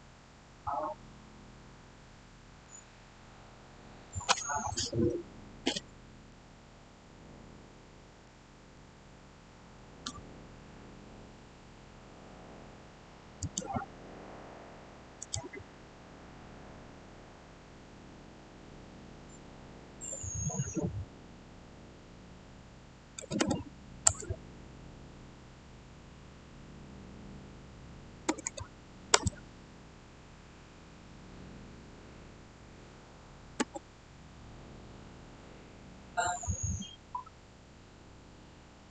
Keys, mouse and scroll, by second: 0.1 shift+scroll down 1, 4.0 click, 5.6 middle click, 6.5-7.1 scroll down 1, 7.1-10.3 middle drag, 13.3 click, 23.1 typing, 23.9 Return, 28.1 Return, 28.2 typing, 29.0 Return, 33.5 typing.